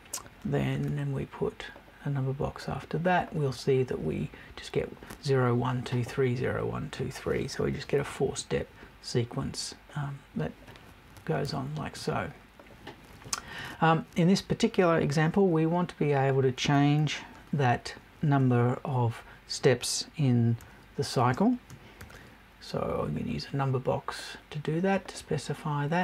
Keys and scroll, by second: 11.4 BackSpace.